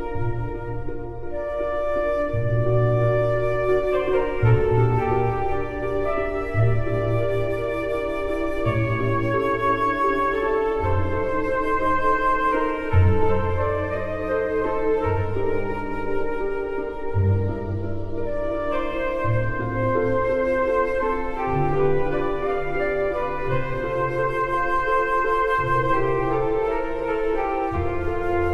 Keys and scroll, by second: 0.8 m, 5.9 ctrl+v, 21.5 ctrl+v.